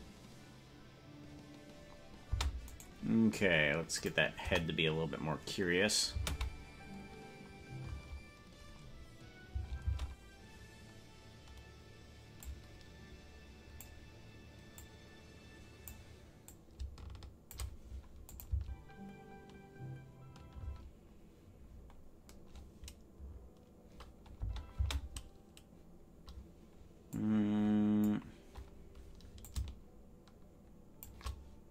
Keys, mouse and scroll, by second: 2.4 space, 2.9-4.0 right drag, 4.0 click, 4.4 KP_0, 6.1 space, 8.1 space, 9.5 space, 10.0 space, 12.4-13.9 drag, 14.7-16.0 drag, 16.4-17.6 drag, 18.4-21.0 drag, 18.5 space, 20.7 space, 24.9 space, 27.2 click, 29.4-31.1 drag.